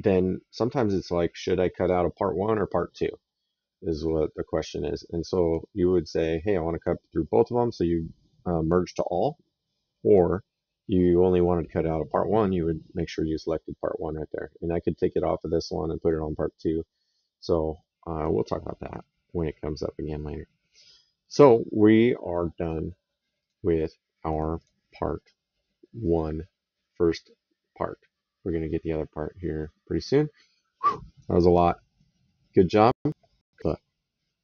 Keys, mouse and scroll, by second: 17.6 middle click, 19.8 middle click, 23.1 click, 24.3 click, 25.8 right click, 32.5 click.